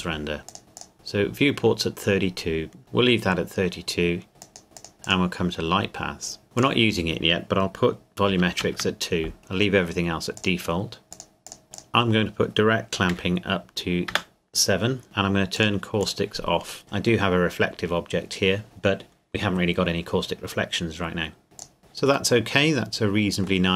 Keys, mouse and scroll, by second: 0.5 click, 4.4 click, 6.6 click, 8.3 KP_2, 8.6 KP_Enter, 10.4 click, 11.1 click, 13.1 KP_7, 14.1 KP_Enter, 15.6 click, 21.6 click, 21.8-22.4 scroll down 1, 22.4 middle click.